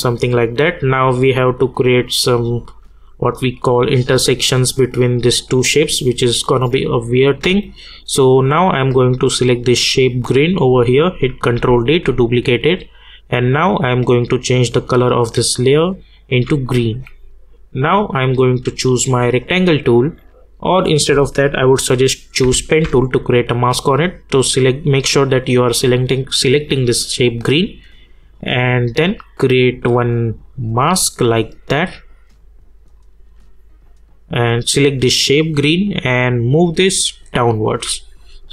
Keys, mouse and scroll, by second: 1.2 click, 8.0 click, 10.6 ctrl+Num_Lock, 10.6 click, 11.5 ctrl+d, 13.4 click, 16.3-21.5 drag, 22.4 g, 24.8 click, 28.3-38.1 drag.